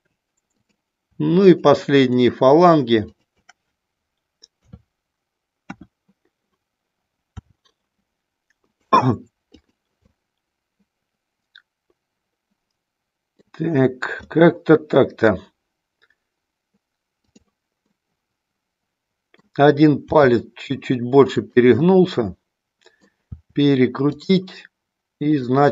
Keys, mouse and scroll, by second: 0.6 click, 1.3 shift+click, 2.0 shift+click, 4.6 KP_3, 5.6 KP_1, 7.4 r, 8.6 click, 9.4 click, 10.1-13.3 middle drag, 14.1-15.3 middle drag, 17.9-19.4 middle drag, 20.1 r, 21.7-23.0 middle drag, 23.4 r, 24.1 click, 25.2 click.